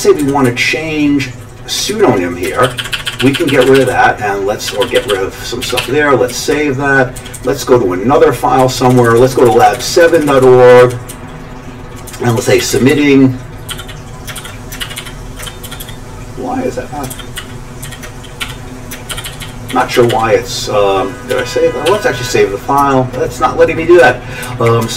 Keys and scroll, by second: 0.2 Down, 0.4-4.9 Right, 0.9 typing, 1.9-4.9 Down, 2.5 ctrl+d, 2.6 ctrl+d, 2.8 ctrl+d, 2.9 ctrl+d, 3.1 ctrl+d, 3.2 ctrl+d, 3.3 ctrl+d, 3.5 ctrl+d, 3.7 ctrl+d, 3.9 ctrl+d, 4.7 ctrl+d, 4.9 ctrl+d, 5.1 ctrl+d, 5.6 ctrl+x, 5.8 ctrl+s, 6.3 Down, 7.2 Page_Down, 7.3 Page_Down, 8.6 Down, 8.8 Down, 8.9 Down, 9.0 Down, 9.2 Down, 9.5 Down, 9.6 Down, 9.9 Down, 10.0 Down, 10.4 Down, 10.8 Down, 11.1 Right, 11.6-12.0 Right, 12.1 Right, 12.4-13.7 typing, 14.4 ctrl+g, 14.8 ctrl+n, 15.0 ctrl+p, 15.2-15.9 typing, 17.1 ctrl+g, 17.4 ctrl+n, 17.8 ctrl+p, 18.4-20.8 typing, 19.1 ctrl+g, 21.3 ctrl+x, 21.9 ctrl+s, 24.0 Page_Up, 24.4 Up, 24.8 Page_Up.